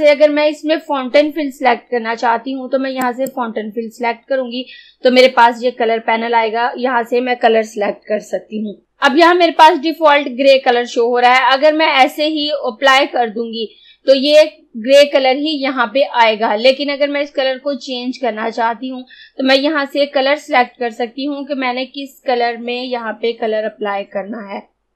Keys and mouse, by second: 3.1 click.